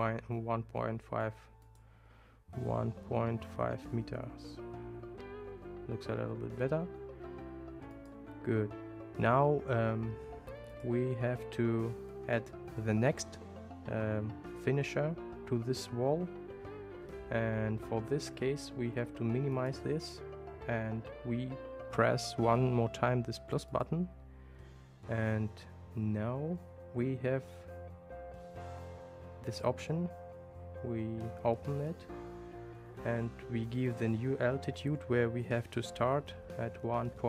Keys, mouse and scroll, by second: 8.0 click, 10.7 click, 19.6 click, 23.7 click, 23.9 typing, 29.6 click, 33.9-37.2 drag.